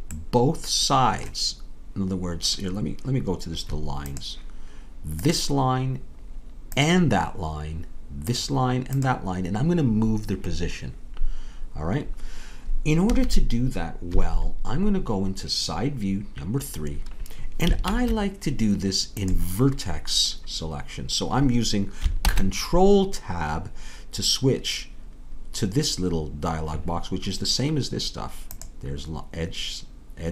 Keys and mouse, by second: 4.8-13.1 drag, 13.1 a, 14.1 KP_3, 17.9 ctrl+Tab, 22.2 ctrl+Tab.